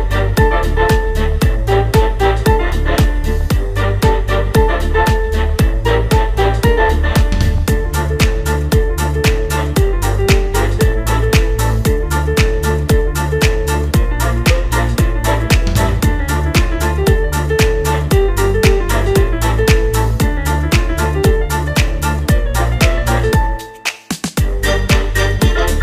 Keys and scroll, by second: 6.4 space, 9.0 space, 9.6 space, 10.7 space, 11.1 space, 11.7 space, 12.0 space, 16.3 space.